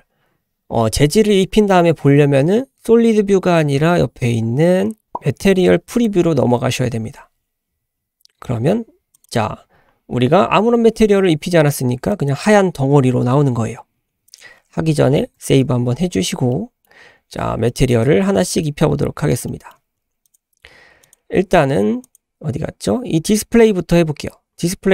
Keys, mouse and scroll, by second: 8.4 click, 9.1 click, 9.5-10.7 scroll down 2, 10.7-11.5 scroll up 1, 11.5 middle drag, 12.1 drag, 14.3 click, 15.3 ctrl+s, 16.5 click, 16.8 middle click, 17.7 shift+middle drag, 18.4-18.9 middle drag, 18.9-19.4 scroll up 2, 19.5-20.2 shift+middle drag, 20.2 click, 21.0 click, 22.0 click, 23.5-24.6 scroll down 3.